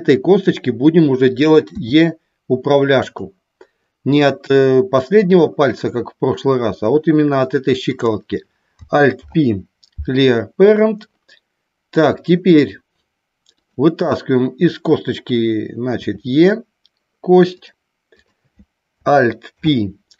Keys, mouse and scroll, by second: 3.0 click, 7.8 click, 9.0 alt+p, 13.4 click, 17.6 click, 19.4 alt+p.